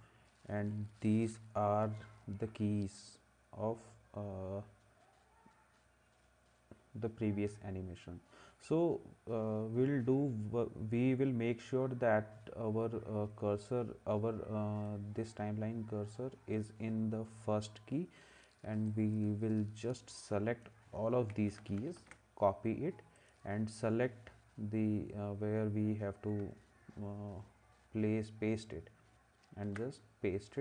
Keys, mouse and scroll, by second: 21.3 ctrl+c, 29.7 ctrl+v.